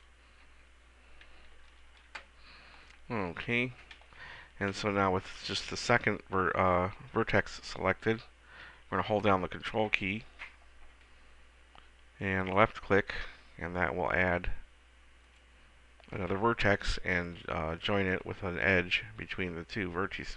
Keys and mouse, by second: 0.6 s, 4.2 a, 4.9 b, 12.5-17.3 drag, 17.3-20.3 middle drag.